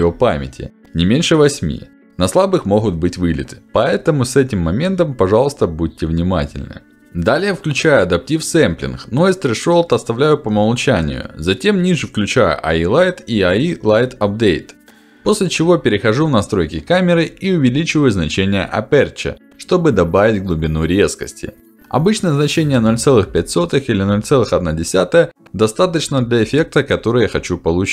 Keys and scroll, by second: 21.7 Return, 25.9 BackSpace, 27.3 0, 27.8 5.